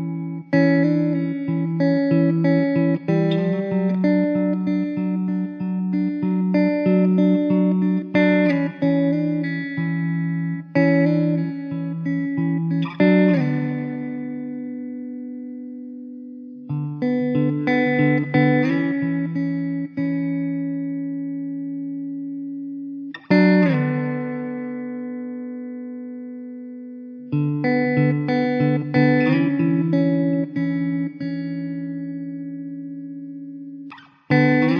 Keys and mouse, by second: 3.1 1, 10.5 s, 11.5 typing, 14.3 middle click, 14.8 2, 19.3 1, 25.4 ctrl+z, 34.3 2.